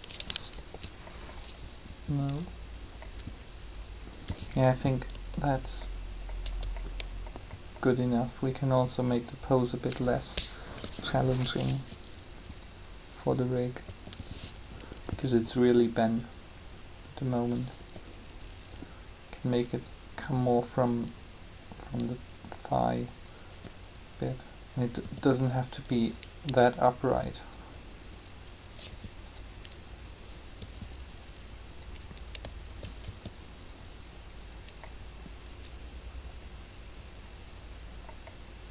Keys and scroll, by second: 0.6 ctrl+z, 5.1 Tab, 10.7 3, 13.8 r, 17.8 r, 23.5 r, 28.9 r, 33.0 shift+r.